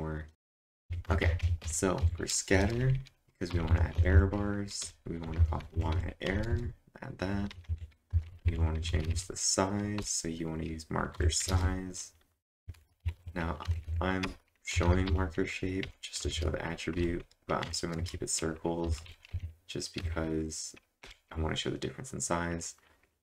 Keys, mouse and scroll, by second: 0.3 ctrl+1, 0.3-6.5 typing, 0.9 click, 1.6 click, 8.9-10.0 typing, 11.5-16.8 typing, 18.0-20.0 typing, 21.0 =.